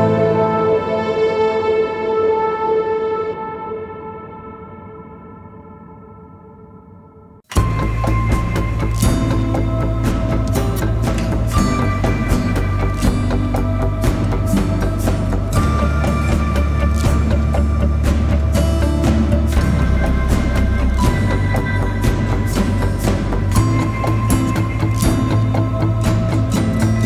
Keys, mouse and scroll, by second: 3.4-4.6 typing, 15.5 double click, 20.1-20.5 typing, 20.8 double click, 23.0-23.8 typing, 24.1 double click, 26.4-27.0 typing.